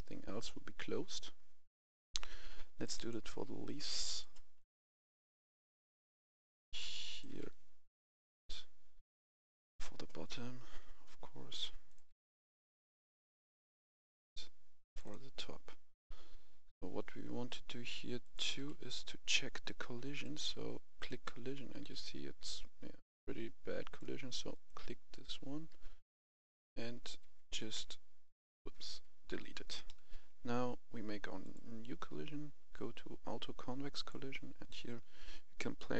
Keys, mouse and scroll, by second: 5.2 scroll down 1, 6.7 scroll down 1, 7.0-9.0 drag, 9.1 click, 10.1-10.5 scroll down 1, 11.4 click, 12.0 click, 12.6 click, 13.0-13.4 scroll down 1, 14.7 click, 15.5 scroll down 1, 18.1 click, 18.5 1, 20.1 click, 21.0-22.8 right drag, 21.4-23.3 typing, 22.8-24.1 right drag, 24.4-26.1 right drag, 26.2 g, 27.1 Escape, 27.7 x, 28.2 Escape, 28.7 Delete, 29.8 middle click, 31.3-35.9 drag.